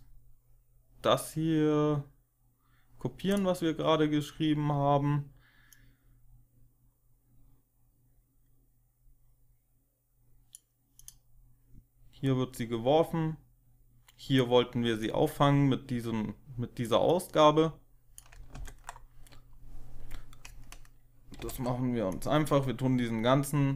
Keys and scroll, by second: 18.4 ctrl+x, 21.3 ctrl+z.